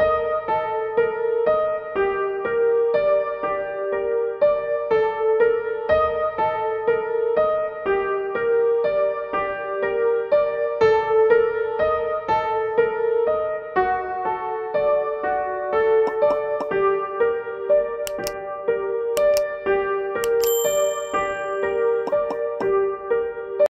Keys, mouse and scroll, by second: 20.8 click.